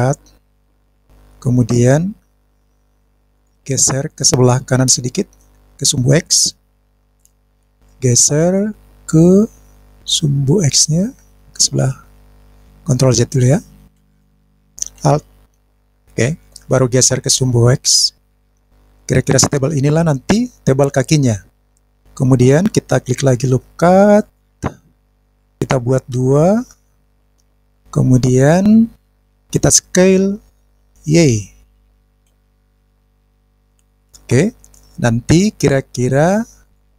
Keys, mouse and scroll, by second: 0.0 click, 0.6 click, 1.4 click, 3.4 click, 5.0-6.0 drag, 6.8 click, 7.8 click, 9.4 click, 9.9 click, 13.2 ctrl+z, 13.9 ctrl+z, 15.7 alt+click, 17.0 click, 17.6 click, 21.7 middle click, 22.0 click, 24.2 click, 25.0 click, 25.4 click, 26.6 click, 27.2 click, 29.1 click, 30.9 s, 34.1 click, 36.6 click.